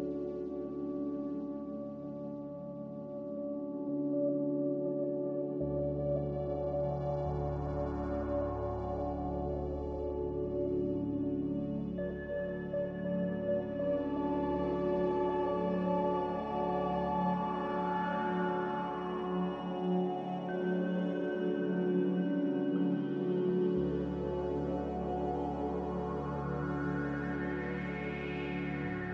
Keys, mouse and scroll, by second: 3.5-4.5 typing, 8.6-9.6 typing, 12.6-13.4 typing, 14.3 Return, 21.1-22.1 typing.